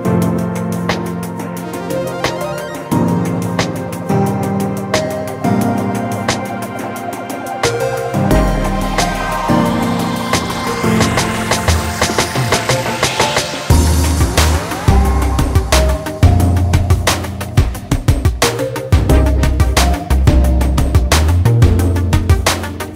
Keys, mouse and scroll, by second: 0.1 scroll up 1, 0.6 ctrl+s, 0.9 scroll up 1, 2.5 scroll up 1, 3.1 click, 3.6 alt+a, 3.7 scroll down 1, 4.4 click, 6.3 click, 6.9 s, 7.5 click, 9.2 Tab, 9.7 click, 13.2 click, 17.0 click, 19.8 click, 21.4 scroll down 1, 22.8 click.